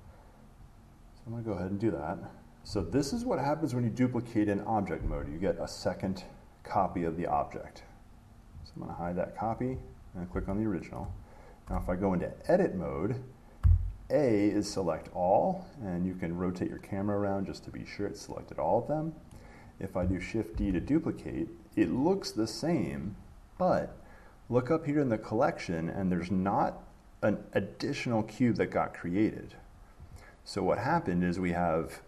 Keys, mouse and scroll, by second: 0.2 click, 6.3 click, 7.1 click, 8.8 click, 9.7 click, 11.1 shift+middle click, 11.8 Tab, 19.5 middle click, 20.7 d, 22.1 click, 30.6 click, 31.3 click.